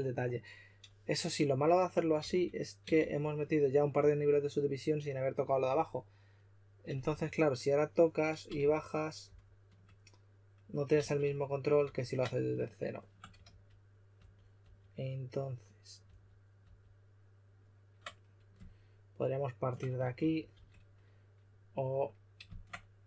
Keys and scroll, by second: 2.2 s, 2.9 shift+f, 7.0 4, 8.5-9.2 typing, 10.9 super+z, 11.1 super+z, 11.8 super+z, 13.4 super+z, 14.1 super+z, 14.5 super+z, 20.1 shift+f, 20.4 shift+f.